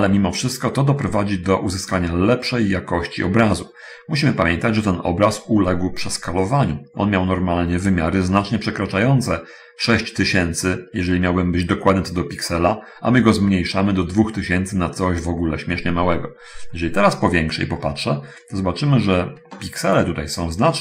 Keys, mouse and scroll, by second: 8.5-9.4 scroll up 1, 16.9-18.1 scroll up 1, 18.1-19.4 middle drag, 19.9-20.8 middle drag.